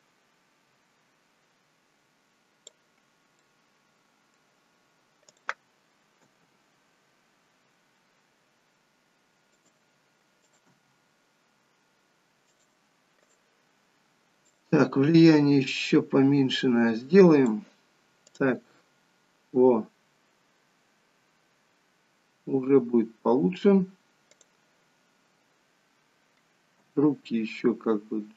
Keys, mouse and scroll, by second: 3.5 middle click, 5.4 click, 6.4 g, 10.4 click, 10.8 g, 13.4 click, 14.7 click, 18.3 click, 18.6 g, 25.5 click, 26.8 g.